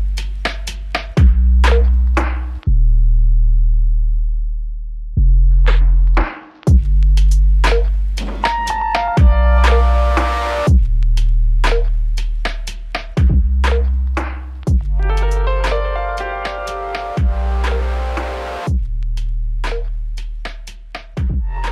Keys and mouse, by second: 1.0 f, 3.6 double click, 14.1 ctrl+click, 19.8 shift+click, 21.4 alt+click.